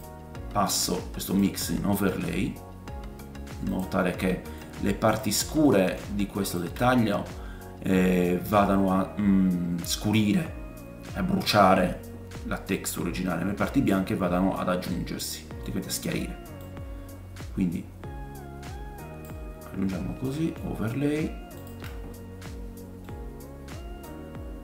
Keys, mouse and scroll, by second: 4.7 click, 5.9-6.5 ctrl+shift+middle drag, 6.5-16.6 ctrl+shift+drag, 9.9-12.9 scroll down 1, 15.2 middle click, 16.6 middle click, 16.7-20.2 drag, 20.2-21.6 middle drag, 21.6-23.8 ctrl+shift+drag, 22.5 middle click, 23.8 right click, 24.0-24.6 drag.